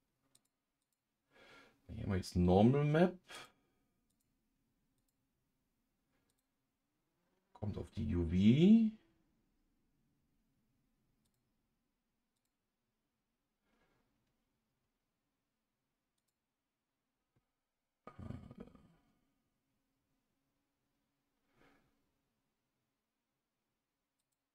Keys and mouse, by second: 0.3 click, 0.8 click, 3.5 click, 5.1-6.4 drag, 11.2 click, 12.4 click, 16.2 click, 24.2-24.5 drag.